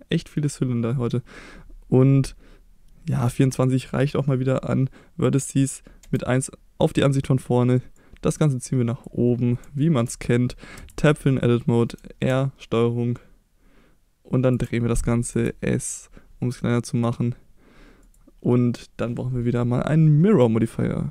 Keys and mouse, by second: 0.1 middle drag, 3.6 middle click, 6.0 KP_1, 8.0-9.0 drag, 9.8-10.1 shift+middle drag, 10.8 Tab, 12.0 r, 14.5 ctrl+click, 15.3 s, 18.0 click, 20.3 click.